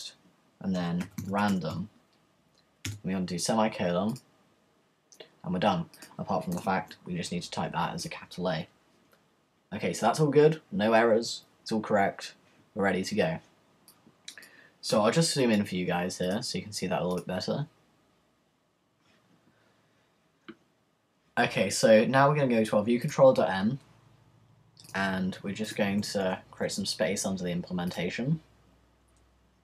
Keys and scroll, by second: 6.8 shift+a, 26.2 Return.